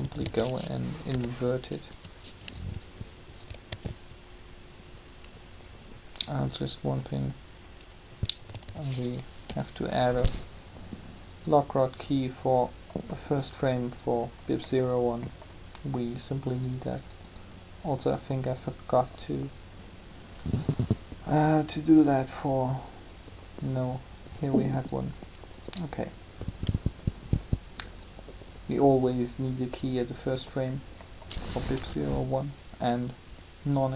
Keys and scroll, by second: 0.0-0.9 typing, 3.7 alt+a, 8.5-9.7 typing, 31.5 3.